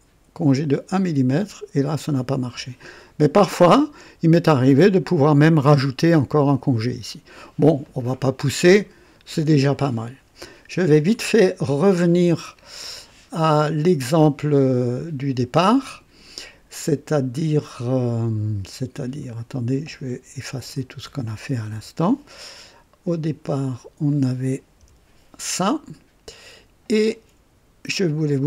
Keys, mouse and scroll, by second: 0.4 click, 2.5 click, 3.6 click, 4.6 click, 6.4-7.5 drag, 7.8-9.0 drag, 18.9 click, 19.9 click, 20.7 shift+click, 21.7 shift+Delete, 24.0 click, 24.7 Delete.